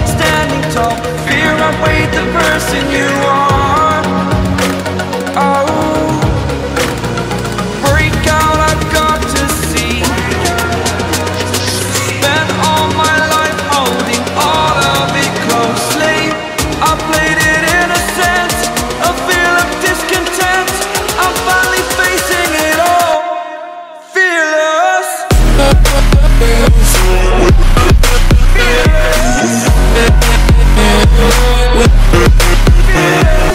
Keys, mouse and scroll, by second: 0.4 click, 2.5-2.8 scroll down 1, 2.8 scroll up 1, 3.2 scroll down 1, 3.5-4.1 scroll up 1, 4.6 click, 5.9 scroll down 1, 6.2-6.5 scroll up 1, 6.8 click, 8.2-8.6 scroll down 1, 8.6-9.0 scroll up 1, 9.0 click, 10.9-11.2 scroll down 1, 11.2 scroll up 1, 11.7 click, 12.8-13.2 scroll down 1, 13.2-13.5 scroll up 1, 13.5-16.0 drag, 16.0-16.4 scroll down 1, 16.4 scroll up 1, 17.4 click, 18.9-19.3 scroll down 1, 19.5 scroll down 1, 20.1 scroll up 1, 21.2 click, 22.7-23.4 scroll down 1, 23.4 scroll up 1, 24.2 click, 24.9 scroll down 1, 25.1-26.3 scroll up 1, 26.3-27.7 drag, 27.8 scroll down 1, 28.1-28.4 scroll up 2, 29.7-31.4 drag, 31.4 scroll down 1, 31.7 scroll up 1, 32.4-33.5 drag.